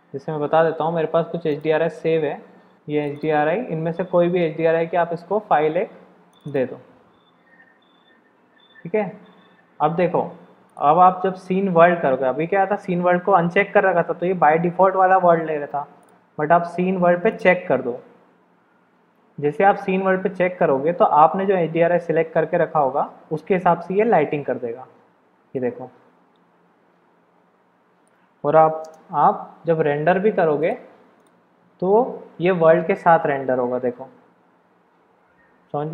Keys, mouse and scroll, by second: 10.7-14.2 drag, 16.0-24.9 drag, 25.6-28.4 middle drag, 28.8 KP_0, 30.7-32.2 drag.